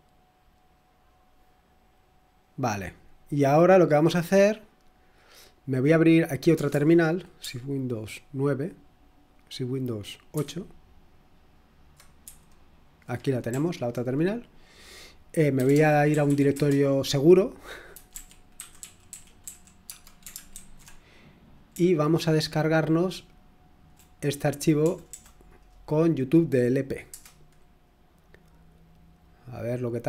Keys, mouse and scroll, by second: 2.4 click, 4.2 click, 5.9 click, 6.7 super+Return, 10.3 super+(, 12.2 super+8, 13.5 super+l, 15.3-19.9 typing, 20.5 ctrl+alt+v, 21.7 BackSpace, 22.3-27.1 BackSpace, 27.1 Return, 29.5-30.0 typing.